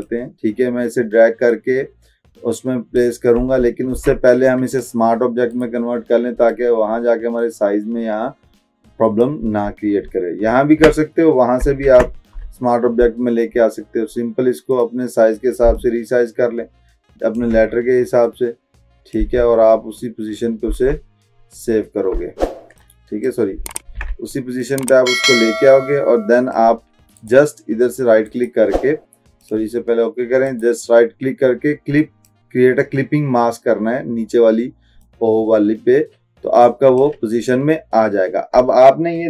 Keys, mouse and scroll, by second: 0.1-3.1 drag, 4.0 ctrl+z, 4.8 click, 5.6 right click, 6.5-9.3 drag, 10.2 alt+scroll down 1, 11.9 ctrl+t, 12.7-13.2 alt+scroll down 1, 14.8 click, 15.8-17.7 shift+drag, 19.6-20.1 alt+scroll up 1, 21.7-22.1 alt+scroll up 1, 22.9-23.5 click, 23.9 ctrl+z, 24.7-26.9 drag, 27.2 right click, 29.5 click, 30.5 right click, 32.3 click, 35.1-37.3 drag.